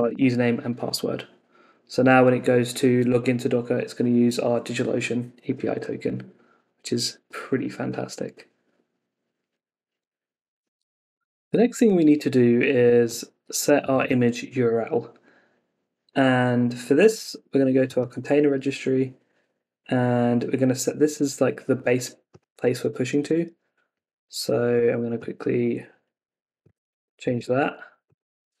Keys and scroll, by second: 23.1 super+Tab, 27.0 super+v, 27.3 ↻.